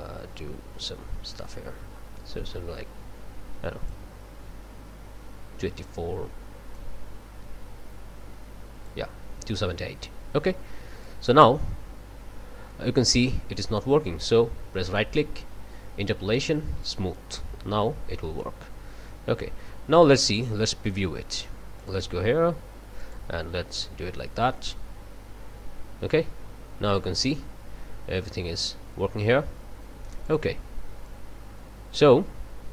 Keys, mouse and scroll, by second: 6.7 click, 11.0-13.4 drag, 14.8-17.1 drag, 18.4-20.6 drag, 21.8 click, 23.0 click, 30.2 click, 31.0-32.7 drag.